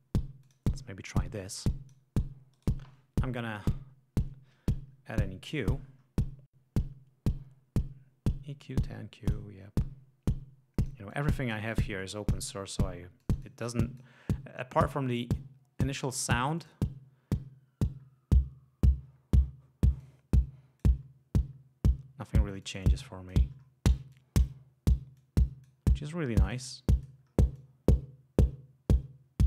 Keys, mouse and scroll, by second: 0.6 click, 1.1 click, 2.6 right click, 5.7-6.1 scroll down 2, 9.2 click, 10.8 click, 11.1-11.7 drag, 12.0 click, 13.2-14.2 drag, 16.6 click, 17.8-18.3 scroll up 2, 19.5 scroll down 2, 20.0 click, 21.5 scroll up 2, 22.6-23.5 drag, 23.5 scroll down 2, 24.1-25.1 drag, 25.2-25.8 drag, 26.3-27.2 drag, 27.2 scroll down 2, 27.5-29.1 drag.